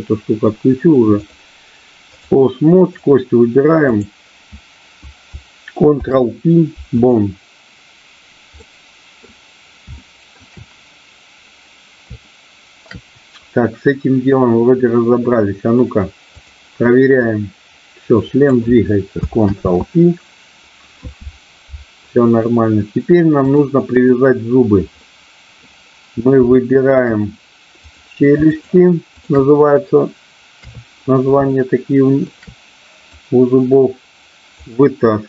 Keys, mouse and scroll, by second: 1.3-2.3 drag, 2.9-4.3 drag, 5.9 ctrl+p, 8.5 middle click, 9.9 shift+middle click, 12.2 shift+middle click, 16.3 click, 17.3-18.5 drag, 20.7 ctrl+z, 23.4 click, 24.9 middle click, 26.5 shift+middle click, 27.8 click, 29.2 shift+click, 30.5 KP_3, 31.5 shift+middle click, 33.2-34.5 drag.